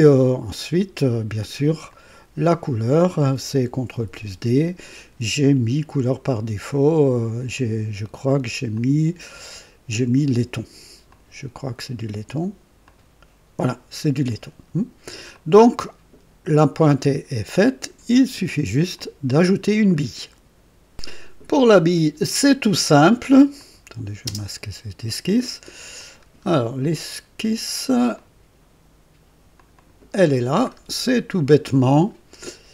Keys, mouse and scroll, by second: 1.8 click, 3.9 ctrl+d, 8.7 click, 11.0 click, 12.2 click, 12.8 click, 15.2-18.1 drag, 18.1 right click, 18.9 click, 23.5 click, 24.2 space, 25.9 click, 26.5-26.8 scroll down 1, 28.1 click, 29.5 click, 30.6 scroll up 1, 31.2-32.1 right drag.